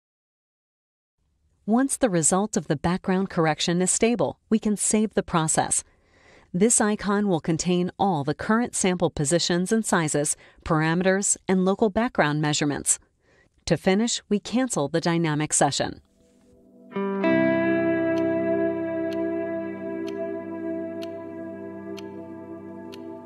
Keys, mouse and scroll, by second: 1.4 click, 2.4 click, 3.2 click, 4.5-7.8 drag, 15.8 click.